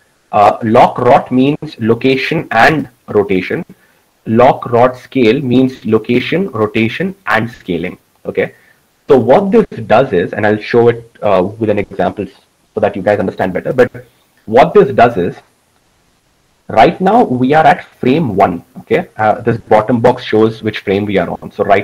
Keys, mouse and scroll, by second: 16.3-21.8 middle drag.